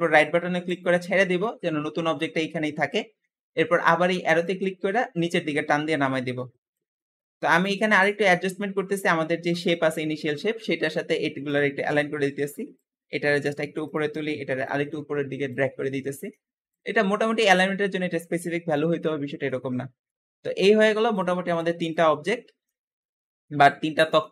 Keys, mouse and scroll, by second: 4.3 click, 6.9 middle click, 7.4-8.1 scroll down 1, 8.1 middle click, 8.8-9.4 scroll down 2, 9.4 click, 10.2-10.5 scroll up 1, 10.5 middle click, 10.9-11.3 scroll up 1, 11.3 click, 11.6-12.6 scroll up 1, 12.6 click, 13.7 click, 14.5 click, 15.7 middle click, 16.5 click, 17.7 click, 18.8-19.3 scroll down 3, 19.3-20.9 middle drag, 20.9 click, 22.1-22.5 scroll down 4, 22.5-23.5 middle drag, 23.5-23.9 scroll down 2, 23.9-24.3 shift+middle drag.